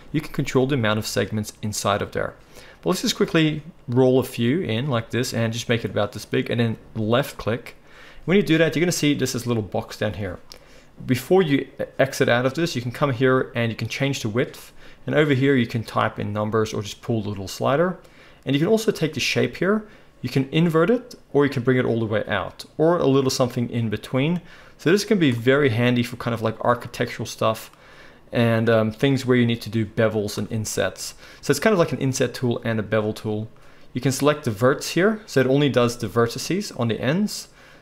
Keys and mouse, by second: 9.2-34.4 drag, 34.4-37.8 middle drag.